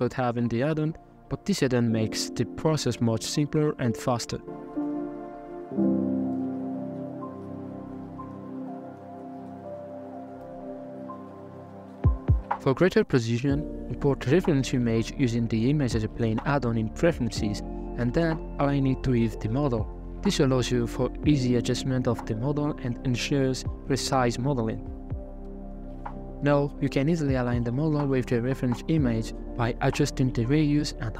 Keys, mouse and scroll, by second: 0.0 KP_Decimal, 1.1 right click, 1.2-3.1 drag, 4.0-5.1 drag, 6.0-8.8 drag, 9.0 scroll down 1, 9.3-10.4 middle drag, 10.4-12.3 drag, 12.3-12.6 shift+middle drag, 12.6 shift+a, 14.0 click, 14.4 middle click, 14.6 r, 15.2 scroll down 3, 15.3 middle click, 15.6 KP_1, 15.8 scroll up 1, 15.9 scroll down 1, 16.0 s, 16.8 g, 17.2 scroll up 4, 17.4 s, 18.8-19.9 drag, 21.7-22.1 scroll up 4, 22.1 middle click, 22.6-23.1 scroll down 2, 23.2 alt+z, 23.9 scroll up 2, 24.4-25.4 shift+middle drag, 25.8-28.8 shift+drag, 29.1-31.1 shift+drag.